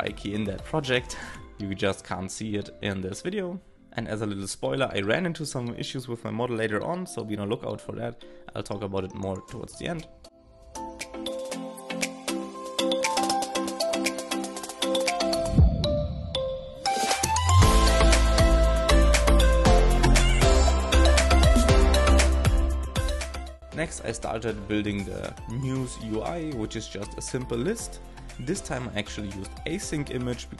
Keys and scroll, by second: 1.2 shift+(, 2.2 super+Right, 5.8-7.5 typing, 7.3 alt+[, 14.4 shift+;, 15.6 alt+[, 15.7 shift+n, 18.2 alt+], 21.6 super+Left, 22.1 super+Right, 22.3 alt+}, 22.6 alt+{, 23.0 shift+9, 26.0 shift+Up, 26.2 shift+h, 26.5 alt+|, 28.1 shift+9.